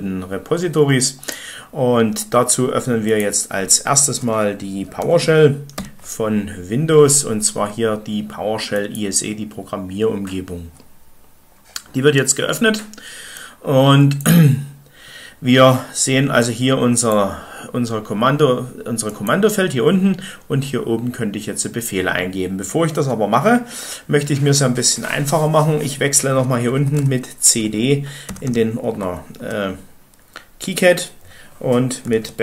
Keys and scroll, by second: 5.1-5.7 typing, 26.5-28.7 typing, 28.9 Tab.